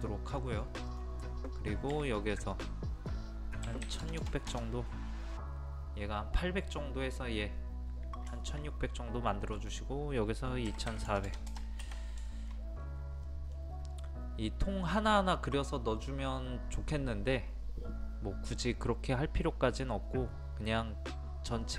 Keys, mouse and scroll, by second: 0.4 middle click, 0.9 click, 1.3 middle click, 1.7 scroll up 1, 2.5 click, 3.7 KP_1, 8.4 shift+middle click, 9.6 click, 10.7 KP_2, 12.3 shift+middle click, 12.8 scroll down 1, 13.3 middle click, 13.9-15.8 scroll up 1.